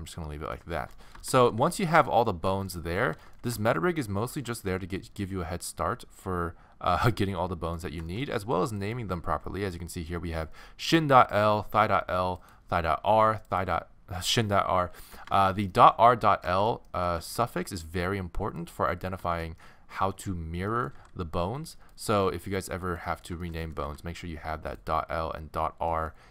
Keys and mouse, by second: 1.4 a, 1.6 a, 6.0-7.0 middle drag, 8.1-10.5 middle drag, 10.5 right click, 11.3-15.0 right drag, 15.0 middle click, 18.6 click, 19.6-20.7 middle drag, 20.9 g, 22.8-24.0 middle drag, 23.8 g, 25.5 middle click.